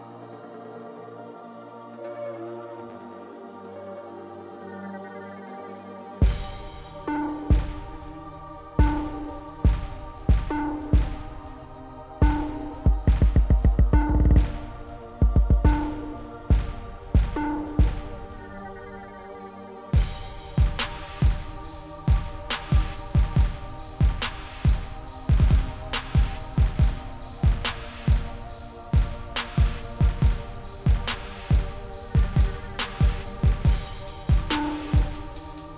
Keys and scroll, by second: 0.9 0, 4.8-6.0 typing, 10.7-11.7 typing, 11.9 Left, 14.1 5, 15.0 ,, 21.0 shift+0, 22.5 0, 33.4 1.